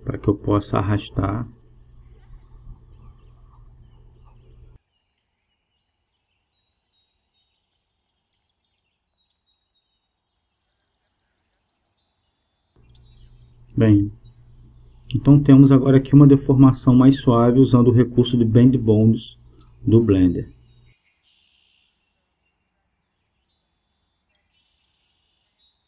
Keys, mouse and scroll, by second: 2.3-4.1 drag, 3.8 g, 9.4-11.1 drag.